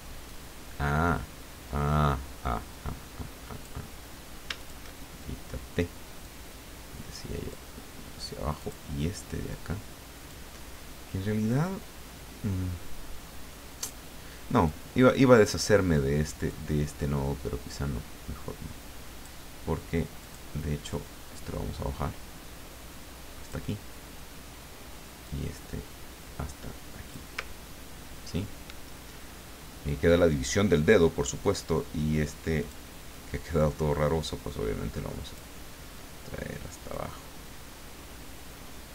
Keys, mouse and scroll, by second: 0.3-3.9 drag, 4.6 shift+click, 6.2-7.9 drag, 8.6 click, 10.3-14.0 drag, 14.6 click, 16.4-19.5 drag, 20.2 click, 20.9-23.6 drag, 25.2-27.3 drag, 27.4-28.8 ctrl+scroll down 2, 32.6 click, 33.1-35.5 drag, 35.9-37.2 drag, 38.1-38.9 scroll up 3.